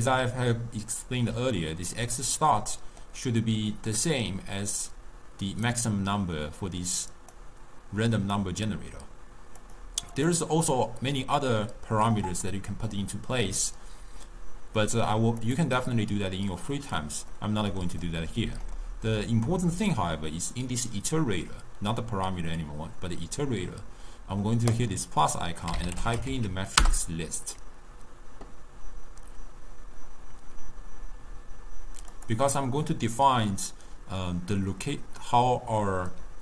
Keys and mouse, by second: 1.0-4.0 middle drag, 4.0 click, 6.4-7.4 middle drag, 7.4 click, 9.7 click, 10.2 click, 10.8-13.9 middle drag, 15.5 click, 15.8-17.4 drag, 17.4-21.9 middle drag, 24.8-31.7 drag, 32.2 click, 36.3-36.4 d.